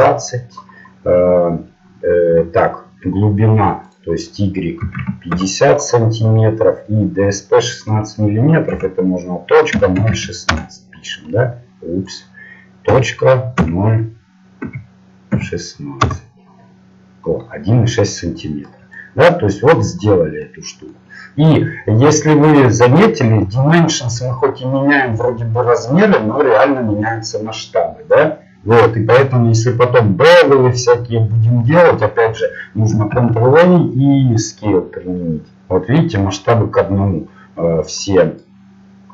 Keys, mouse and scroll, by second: 18.7-23.7 middle drag, 33.3-34.8 middle drag, 34.8 ctrl+a, 38.0-39.1 middle drag.